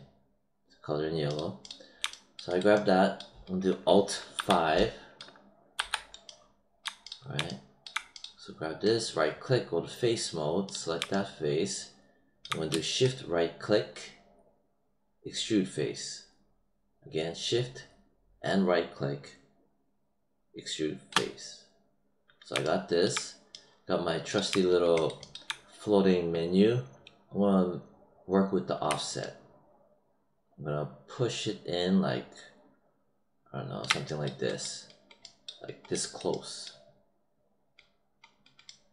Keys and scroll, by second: 4.3 alt+5, 5.7 alt+5.